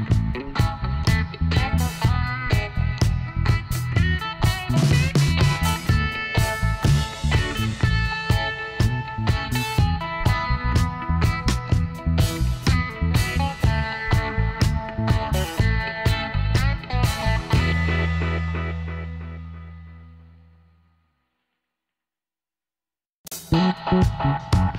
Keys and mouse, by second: 3.3-6.4 drag, 4.1 g, 7.2 s, 10.1 s, 13.0-15.1 drag, 16.1-17.9 drag, 17.9 shift+s, 19.7 Tab, 21.1 a, 22.2 shift+a.